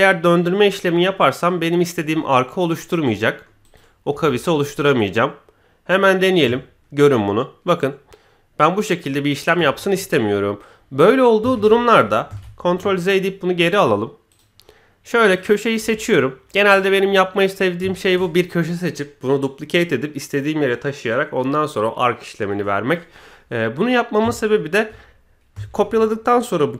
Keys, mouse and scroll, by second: 2.7 click, 3.2 middle click, 3.6 click, 4.1 KP_1, 5.9-9.4 drag, 11.5 ctrl+z, 12.3 ctrl+z, 12.9 middle click, 14.3 click, 15.2 click, 15.8 KP_1, 17.9 shift+middle click, 24.3 shift+middle click, 25.1-25.5 scroll up 1, 25.7 shift+d.